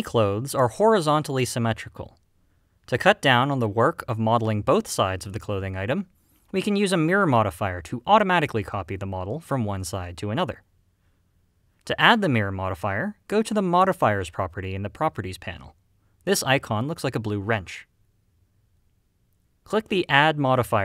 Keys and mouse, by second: 0.0 alt+a.